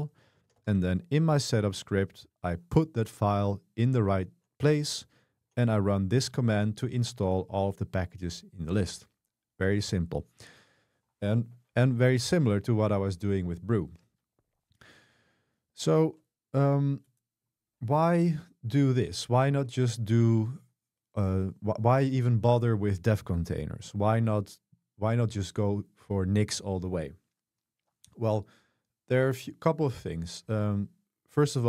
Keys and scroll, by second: 0.0-1.1 typing, 4.8-5.9 typing.